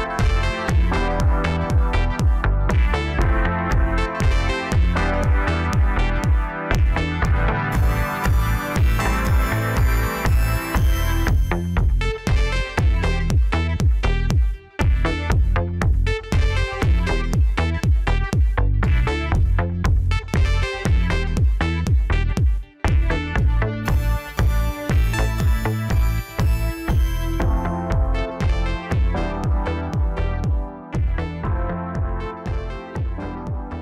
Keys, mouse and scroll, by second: 1.1 drag, 1.5-3.2 middle drag, 3.2-4.0 scroll up 1, 4.0 Tab, 4.5-5.7 middle drag, 5.7 click, 7.5 click, 8.1 click, 8.6-10.7 middle drag, 10.7-12.4 scroll up 1, 12.4 shift+d, 14.2 e, 16.2 middle click, 17.1-18.1 scroll up 1, 18.1 ctrl+r, 19.7 middle click, 20.6 3, 21.1 click, 22.1 i, 26.2 click, 26.7 middle click, 27.6-29.3 scroll down 1, 29.3 shift+d, 31.7 scroll down 1, 32.0-33.1 middle drag, 33.1 e.